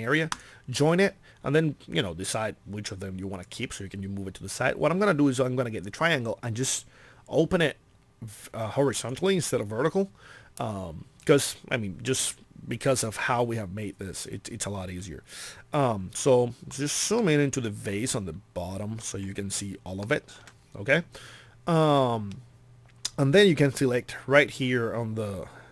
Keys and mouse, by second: 6.7 click.